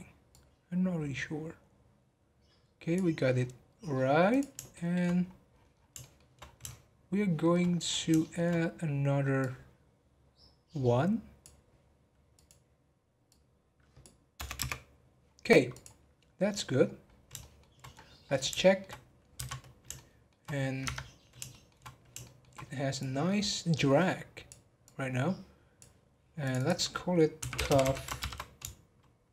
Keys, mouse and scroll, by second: 0.3 click, 4.3 click, 4.7 shift+middle click, 5.2 scroll up 1, 5.5 scroll down 10, 6.0 shift+middle click, 6.4 scroll down 1, 6.6 shift+middle click, 7.6-8.2 scroll up 3, 8.2 shift+middle click, 8.5-9.3 scroll up 1, 9.3 click, 12.3-15.5 drag, 15.7 click, 16.1 scroll down 1, 17.1 scroll down 10, 17.4-17.9 shift+middle drag, 17.9 scroll up 2, 18.6 shift+middle click, 19.3 n, 19.6 scroll down 1, 19.9 shift+middle click, 20.5 scroll down 1, 20.8 Tab, 21.5-23.0 shift+middle drag, 23.0-27.8 drag, 27.8 f.